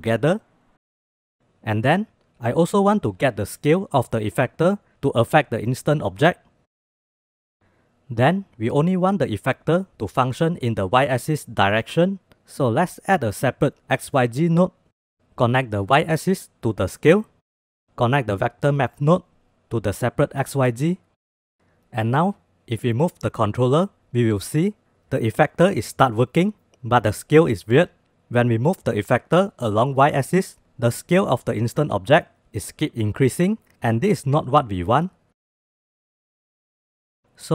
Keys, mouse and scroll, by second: 0.4 drag, 1.2 click, 1.5 click, 2.3 shift+d, 3.7-5.0 drag, 7.4-11.9 drag, 11.9 g, 12.4 shift+a, 15.1-15.9 middle drag, 16.6-17.6 drag, 18.0-20.4 drag, 23.4 click, 24.4-34.0 drag, 34.2 ctrl+z, 35.1 click, 36.3 click.